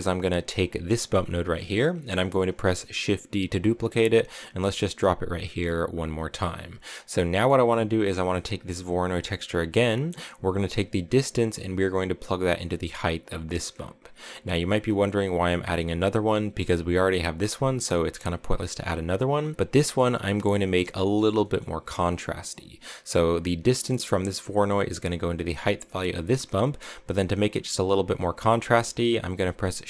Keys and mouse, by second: 0.8 click, 1.5 middle click, 3.7 shift+d, 5.8 click, 6.5 click, 7.2 middle click, 10.4-13.7 drag, 14.1 click, 16.8 click, 20.5 middle click, 21.3 middle click, 25.8 click, 28.6 middle click, 29.3 shift+a.